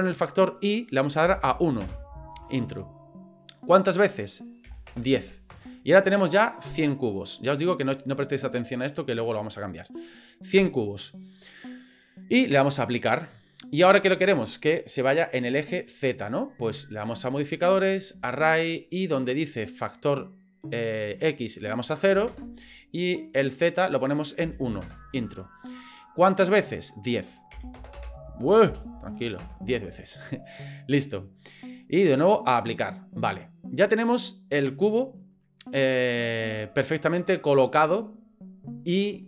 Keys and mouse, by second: 0.4-2.5 drag, 3.7-6.0 drag, 9.5-10.1 middle drag, 10.6 middle click, 12.7 click, 16.6-18.3 drag, 20.0 click, 21.0 click, 21.4-22.7 drag, 23.5-25.4 drag, 26.7-29.7 drag, 27.9 KP_0, 30.5-31.2 middle drag, 32.3-32.9 drag, 33.8-35.2 middle drag, 35.4 middle click.